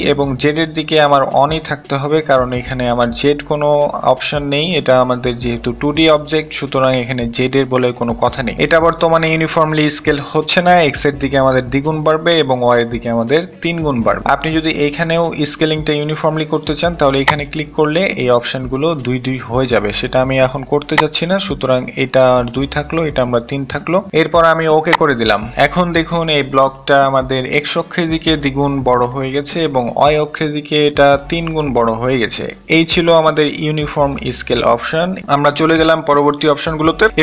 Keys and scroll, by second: 0.3 3.